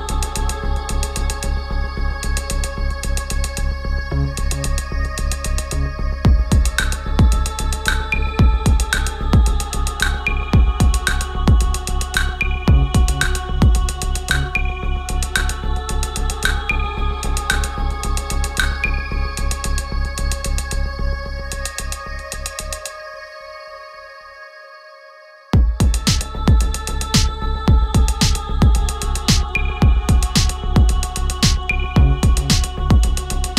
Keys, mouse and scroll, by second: 10.0 click, 12.3 click, 14.2 click, 15.9-18.6 typing, 21.6-23.6 drag, 25.8-28.5 drag, 28.5 click, 31.3-32.5 drag.